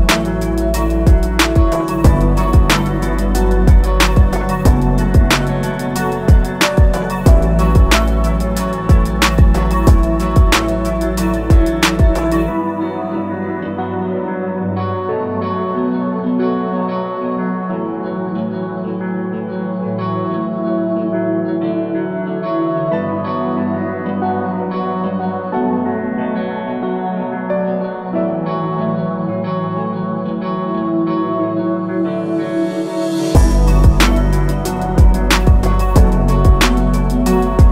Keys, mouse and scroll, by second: 0.1 a, 0.4 click, 3.0 i, 3.5 click, 13.2 a, 13.6 click, 15.3 a, 16.3 click, 16.5 i, 16.8 click, 23.0 a, 23.6 click, 25.4 i, 25.7 click, 36.0 click, 37.5 a.